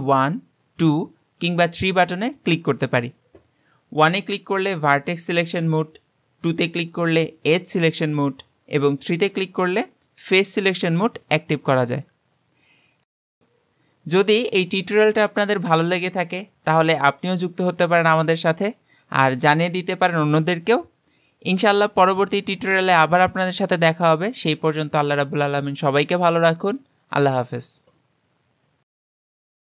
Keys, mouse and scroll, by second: 3.1 3, 4.0 1, 6.4 2, 9.2 3.